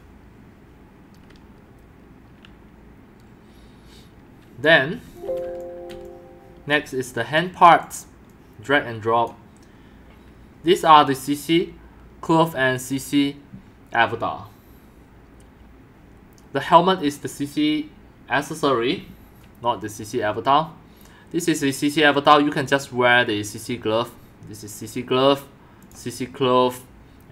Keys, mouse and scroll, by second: 4.8-6.4 typing, 5.6 click, 6.0 click, 6.5 click, 7.8 click, 8.3 click, 25.8 click.